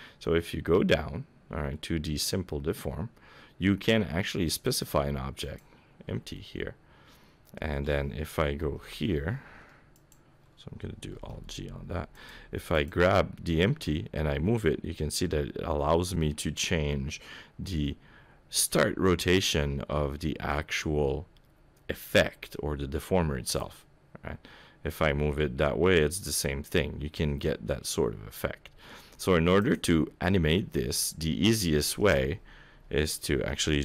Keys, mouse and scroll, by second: 4.6 click, 6.4 middle click, 8.6 KP_7, 10.0 click, 11.3 alt+g, 12.2 click, 12.7 click, 13.7 g, 23.8 middle click, 25.1 g, 29.9 middle click, 32.7 KP_7.